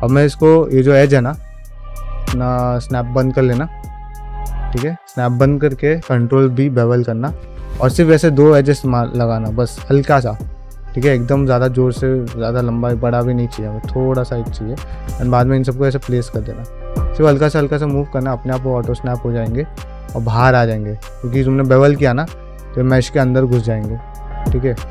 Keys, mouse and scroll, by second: 6.0 ctrl+b, 9.5-11.4 middle drag, 11.7 ctrl+middle click, 12.0 shift+middle click, 12.9 1, 13.2 middle click, 13.6 click, 13.9 middle click, 14.3 g, 15.0 click, 15.3 g, 15.7 middle click, 16.1 g, 16.9 click, 17.2 g, 17.9 shift+Tab, 18.5 g, 19.2 click, 19.7 g, 20.1 middle click, 20.5 click, 20.9 g, 21.3 middle click, 21.8 click, 22.2 g, 22.6 middle click, 22.9 shift+middle click, 23.4 click, 23.9 g, 24.3 middle click, 24.6 shift+middle click.